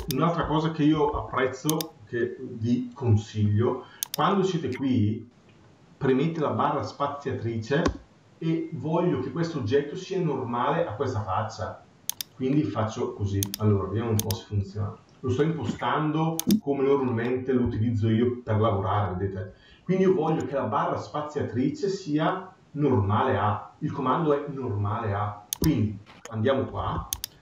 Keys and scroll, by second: 0.9 Escape, 26.5 Escape.